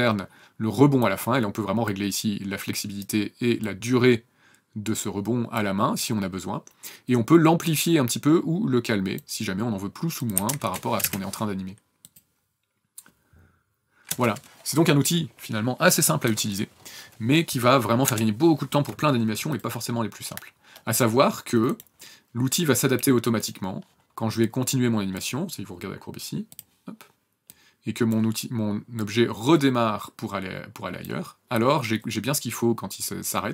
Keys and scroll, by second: 10.3 KP_1, 10.4 KP_0, 10.6 KP_0, 11.0 KP_Enter, 14.1 KP_0, 18.0 KP_0.